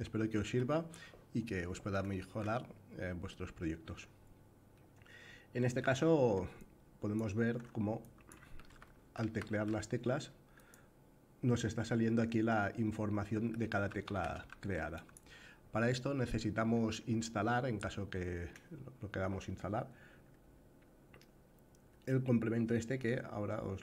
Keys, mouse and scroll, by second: 3.0-3.6 middle drag, 4.4-5.5 middle drag, 6.2-6.9 shift+drag, 7.8 drag, 8.2 a, 8.8 s, 13.0 f, 14.0 d, 14.0 a, 14.6 click, 14.6 f.